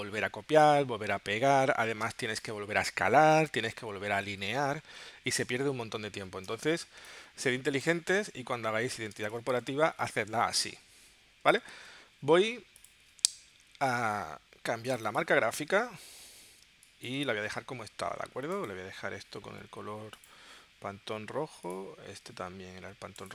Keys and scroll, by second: 2.0 space, 6.5 space, 9.1 space, 11.8 super+w, 13.2 super+Tab, 16.6 space.